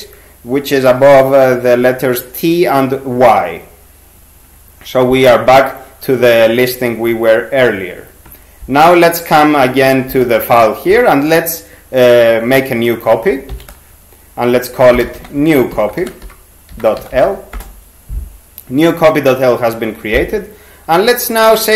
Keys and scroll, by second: 10.1 n, 13.5 shift+c, 14.7-17.7 typing.